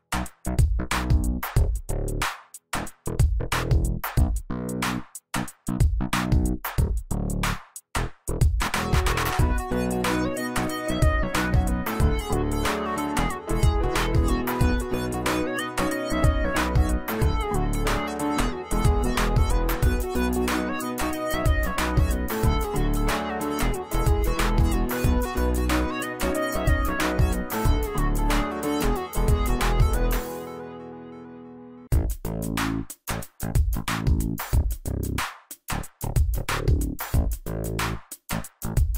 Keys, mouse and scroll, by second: 0.0-1.9 alt+shift+drag, 15.1 z, 15.4 alt+click, 16.1 space, 16.3-17.2 click, 16.6 space, 18.2 click, 18.4-21.8 drag, 26.5-30.1 drag, 35.3-38.9 drag.